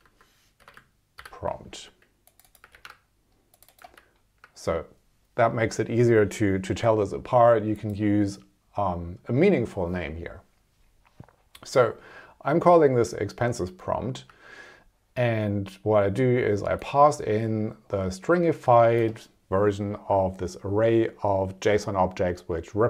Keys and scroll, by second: 0.7 BackSpace, 1.2 shift+p, 2.7 super+c, 3.9 super+v.